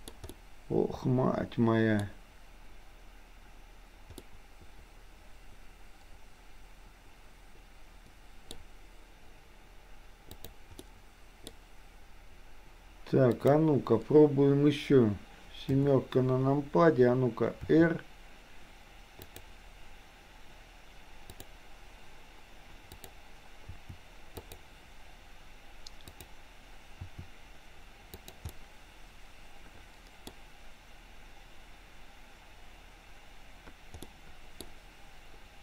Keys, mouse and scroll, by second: 0.4-1.2 scroll up 1, 1.2-2.1 scroll up 1, 4.3-8.6 middle drag, 10.8 middle click, 13.3 click, 15.7 KP_7, 17.7 r, 21.3 click, 22.8 click, 23.7 r, 26.2 click, 27.1 r, 28.6-29.7 middle drag, 29.8 middle click, 34.1-34.7 middle drag.